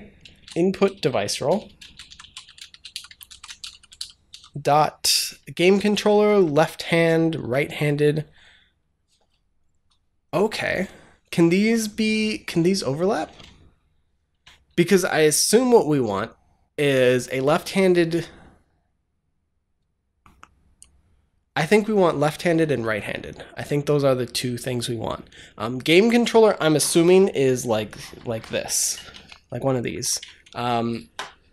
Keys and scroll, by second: 0.2-4.7 typing, 6.0 Down, 14.2 Up, 15.7 Down.